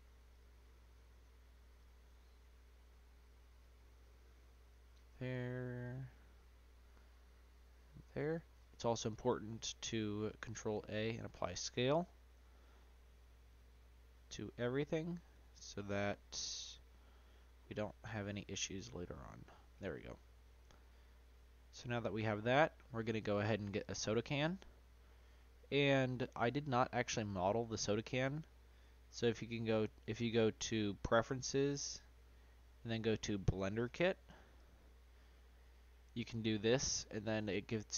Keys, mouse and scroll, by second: 0.3 click, 1.7 click, 3.5-5.9 drag, 7.5-10.5 drag, 10.5 ctrl+a, 11.9 click, 12.3 ctrl+a, 14.7 click, 15.8 ctrl+a, 17.1 click, 18.1 ctrl+a, 19.5-19.9 scroll down 1, 20.3 scroll down 1, 20.4-23.8 middle drag, 23.8-24.9 scroll down 1, 26.4 click, 29.1-33.8 drag.